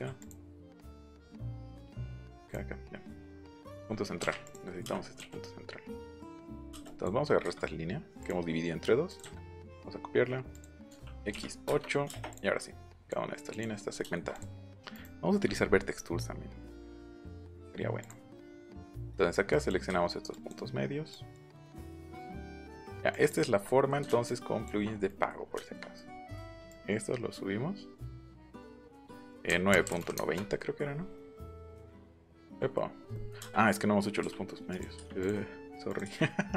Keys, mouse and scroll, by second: 0.2 click, 0.9 click, 1.5 click, 2.4 click, 3.6 click, 4.1 Up, 4.4 click, 5.3-6.3 drag, 6.8 click, 7.4 q, 8.1 click, 9.0 click, 10.5 click, 11.3 8, 11.6 Return, 12.2 click, 12.9 click, 13.5 click, 13.9 shift+middle click, 14.3 click, 14.9 click, 16.7 click, 18.0 click, 18.3 middle click, 18.9 middle click, 19.5 click, 20.3 ctrl+click, 21.1 ctrl+click, 21.6 ctrl+click, 22.4 ctrl+click, 23.1 ctrl+click, 23.6 middle click, 24.2 shift+click, 26.6-28.9 drag, 29.4 KP_9, 29.7 KP_Decimal, 29.8 KP_9, 30.1 KP_Enter, 31.4 middle click, 32.4 ctrl+z, 34.6 click, 35.1 click, 35.8 click.